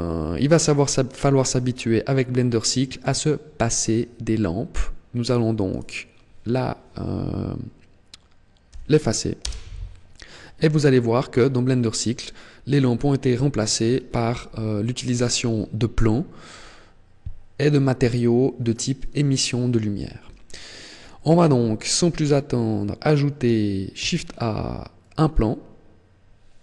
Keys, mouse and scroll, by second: 4.9 right click, 5.4 right click, 8.4 Delete, 22.0 middle click, 23.7 shift+a, 26.3 g.